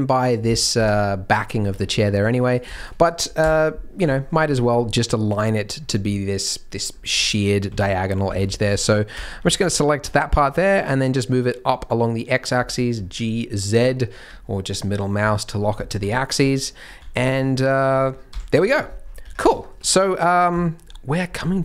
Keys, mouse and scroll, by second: 0.8-1.5 scroll down 1, 1.5-1.8 scroll down 3, 1.7 Tab, 1.8-2.5 scroll up 6, 2.5 click, 2.7 shift+click, 3.4 KP_3, 3.9 scroll down 3, 4.1 shift+middle click, 4.8-5.5 scroll up 1, 5.5 scroll up 1, 5.7-6.4 scroll down 1, 6.4-6.9 scroll down 2, 6.9-7.6 scroll up 4, 7.6 z, 8.2 alt+a, 8.4 c, 9.2-10.0 scroll down 4, 9.6 g, 10.5 g, 12.9-13.5 scroll down 3, 13.5 middle click, 14.2-15.4 scroll down 1, 15.4 middle click, 15.4 scroll down 1, 15.8 shift+middle click, 16.4 Tab, 16.4 middle click, 16.6 middle click, 16.9 z, 17.3 middle click, 18.2 KP_3, 18.9-19.4 scroll down 4, 19.2 Tab, 19.5 shift+middle click, 19.8-20.4 scroll up 2, 20.5 shift+middle click.